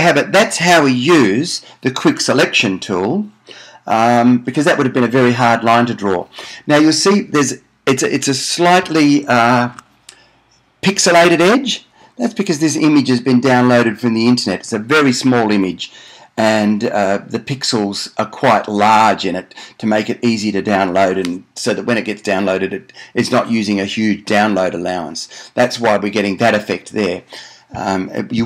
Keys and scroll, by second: 9.9 super+d.